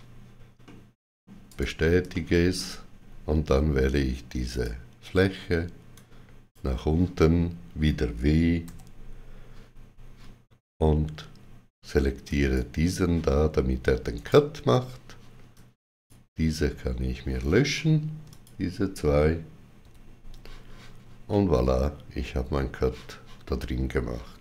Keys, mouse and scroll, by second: 0.5 middle click, 1.4 right click, 2.0 shift+middle click, 4.4 click, 5.8 click, 8.5 w, 12.2 click, 12.2 w, 12.2 click, 14.0 right click, 15.4 click, 18.1 shift+click, 19.7 x, 21.2 middle click.